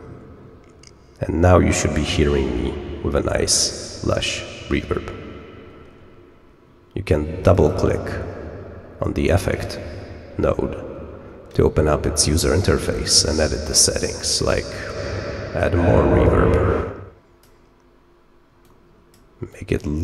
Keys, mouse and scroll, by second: 7.4 click, 7.5 click, 14.7-17.4 drag, 18.6 click, 19.4 click.